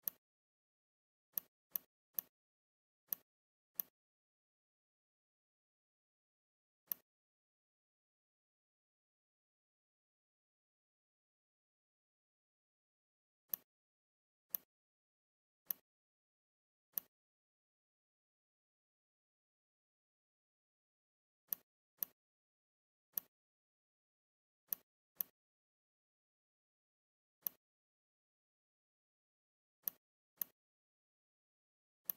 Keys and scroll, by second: 7.6 Delete, 17.8 Up.